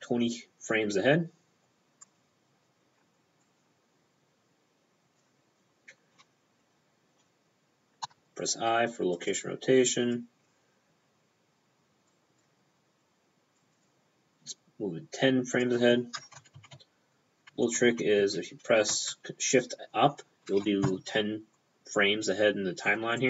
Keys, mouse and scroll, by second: 3.5 click, 5.3 p, 8.1 i, 8.2 p, 9.2 click, 12.1 click, 13.7 click, 13.8 p, 13.9 click, 15.7 p, 16.4 Left, 16.6 Left, 16.7-19.2 typing, 16.8 Left, 17.3-17.7 Left, 17.9 Left, 18.2 Up, 19.0 shift+Up, 23.2 click.